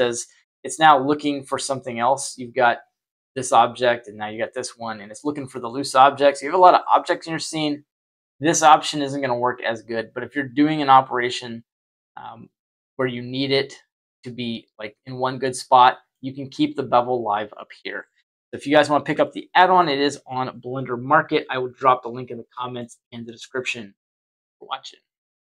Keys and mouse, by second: 5.9 Delete, 11.2-12.6 middle drag, 15.4-16.1 middle drag, 18.6-19.0 shift+middle drag, 19.2-22.7 middle drag.